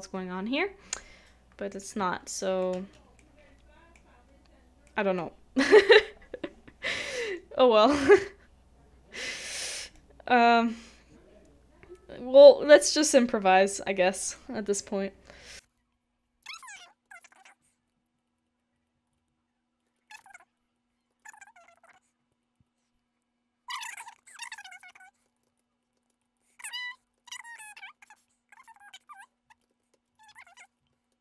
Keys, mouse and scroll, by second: 1.9 middle click, 2.2 shift+middle click, 9.1 middle click, 17.1 shift+middle click, 20.0 shift+middle click, 21.1 shift+middle click, 24.1 middle click, 24.4 middle click, 25.2 shift+middle click, 25.4 shift+middle click, 25.6-25.9 shift+scroll down 1, 26.0 shift+middle click, 26.1 shift+middle click, 26.5 shift+middle click, 26.6 shift+middle click, 26.7 shift+middle click, 27.3 shift+middle click, 27.5 shift+middle click, 27.5 shift+middle click, 29.2 right click, 29.7 ctrl+z, 30.9 typing, 31.0 shift+middle click.